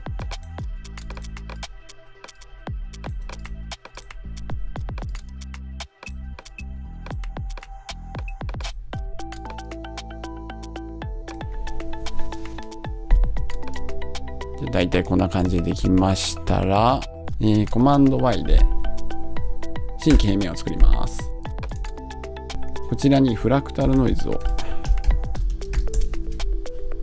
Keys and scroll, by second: 17.2 BackSpace, 19.9 Return, 26.0 Return.